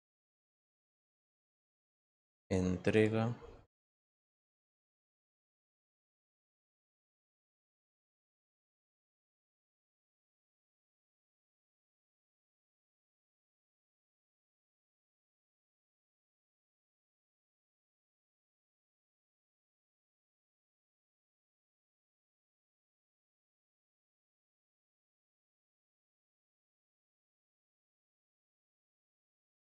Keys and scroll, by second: 3.4-4.9 typing, 10.3-11.2 typing, 16.5 ctrl+z, 28.0 t.